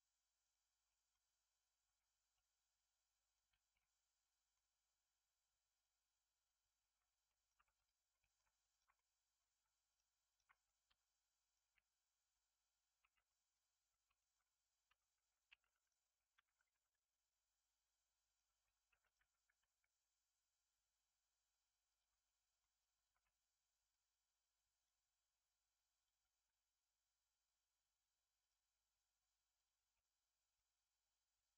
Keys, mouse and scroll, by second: 0.6 scroll down 2, 0.8 middle click, 1.8 Tab, 2.3 middle drag, 2.5-5.7 right drag, 3.7 middle click, 5.7-6.9 drag, 6.9 Tab, 7.2 middle click, 7.5 2, 7.7 click, 8.0 middle click, 8.6 shift+click, 8.9 middle click, 9.8 shift+click, 10.2 shift+click, 10.4 middle click, 10.8 x, 11.6-12.9 middle drag, 12.9 Tab, 13.2-13.9 right drag, 13.9 scroll down 1, 14.1-15.1 right drag, 14.1 shift+middle click, 15.1 Tab, 15.6 ctrl+r, 18.8 ctrl+r, 22.2 middle click, 23.1 Tab, 23.7 click, 24.8-29.9 drag, 29.9-31.5 right drag, 29.9 middle click.